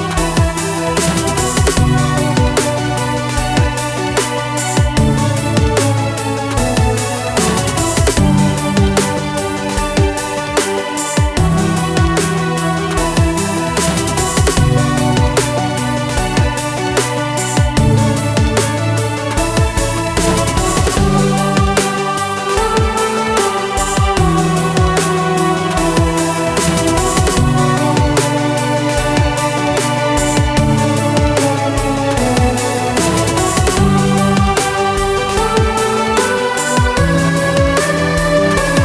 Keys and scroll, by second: 17.8 Delete, 19.7-21.3 typing, 25.3 ctrl+w, 31.4 Delete, 33.3-34.9 typing, 34.9 Down, 35.2 Return.